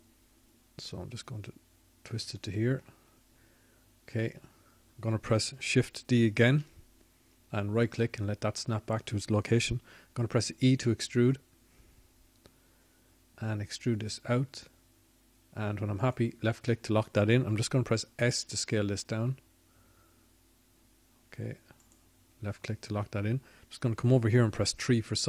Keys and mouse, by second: 1.5 middle click, 2.9 middle click, 12.5 shift+d, 14.0-15.4 drag, 15.9 e, 22.2-24.3 drag, 24.3 s.